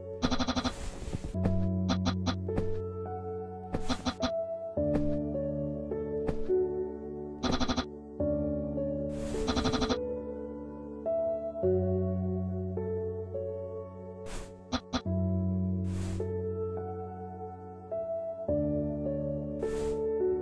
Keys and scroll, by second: 2.3-3.7 typing, 4.9 typing.